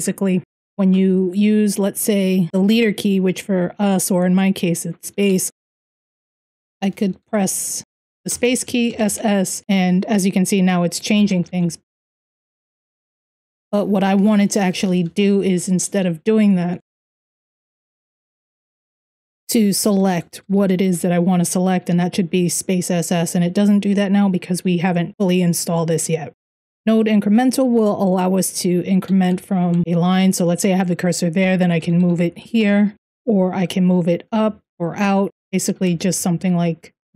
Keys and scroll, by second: 0.2 Right, 0.3 Right, 5.5-8.7 typing, 6.4 Escape, 10.8 Escape, 11.1-20.5 typing, 12.1 ctrl+r, 26.4 typing, 28.9-29.5 typing, 31.2-31.9 typing, 33.2-36.2 typing.